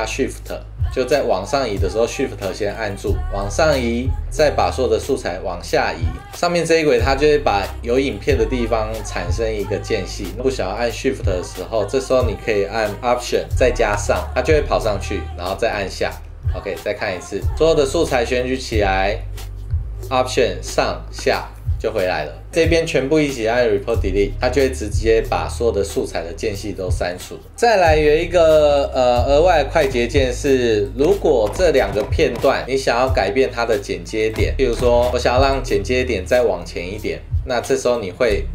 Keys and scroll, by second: 14.0 alt+Up, 15.7 alt+Down, 16.7 super+z, 20.7 alt+Up, 21.2 alt+Down, 22.5 super+z, 24.7 super+4, 27.5 =, 34.7 space.